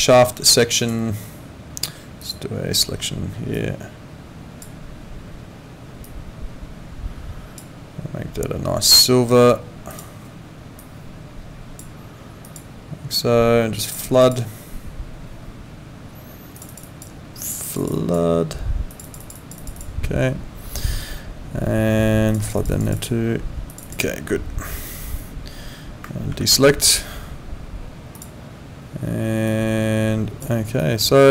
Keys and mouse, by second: 0.8 click, 2.2 click, 3.5 click, 6.1 click, 9.9 click, 12.4 click, 13.9 click, 16.5 click, 22.3 click, 26.3 ctrl+d, 28.1 click, 29.5 click, 30.8 click.